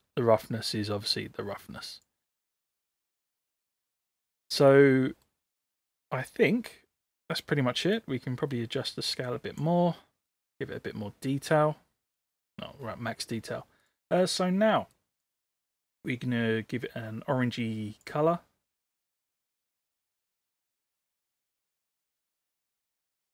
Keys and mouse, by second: 4.3-5.3 middle drag, 8.0-9.6 drag, 10.4-12.2 drag.